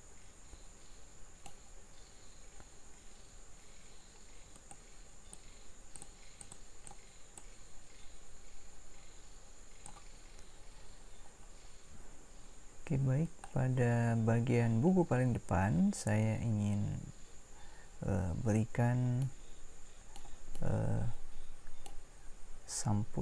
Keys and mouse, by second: 9.9 click, 10.3 middle click, 13.2-19.1 right drag.